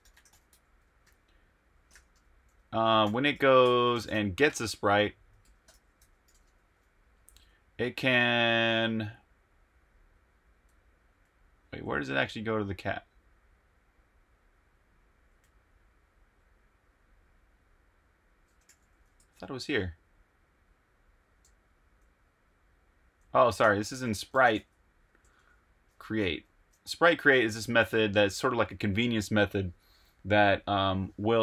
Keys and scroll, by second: 0.0-1.0 typing, 2.1-4.4 typing, 5.4-6.2 typing, 7.5 typing, 10.5-12.2 typing, 13.7-15.9 typing, 17.6 typing, 21.4-25.8 typing, 27.0-28.0 typing.